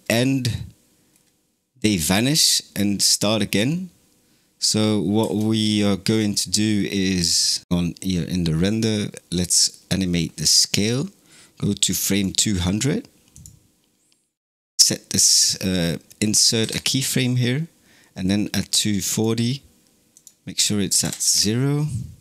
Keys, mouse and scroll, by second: 1.0 scroll down 1, 2.0-2.6 scroll down 2, 5.0 space, 7.6 scroll up 3, 9.4-16.5 drag, 19.0-22.2 drag.